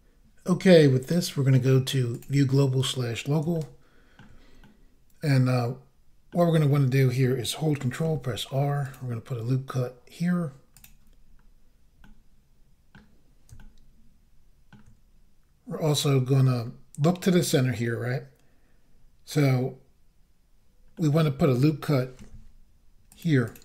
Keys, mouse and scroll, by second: 2.1 click, 3.5 shift+middle click, 4.6 middle click, 6.4 scroll up 1, 8.0 ctrl+r, 8.8 click, 10.7 click, 11.3-12.0 scroll down 1, 12.0 middle click, 13.6 shift+middle click, 16.6 scroll down 1, 20.9 middle click, 22.2 ctrl+r, 23.1 click, 23.5 click.